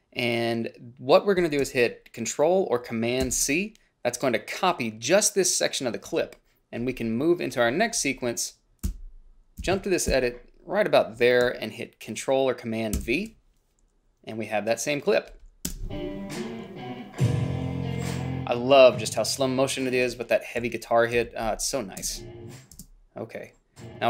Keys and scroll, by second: 3.3 ctrl+c, 9.0 Down, 9.7 Left, 10.2 Left, 13.1 ctrl+v, 15.8 space, 20.2-22.9 typing.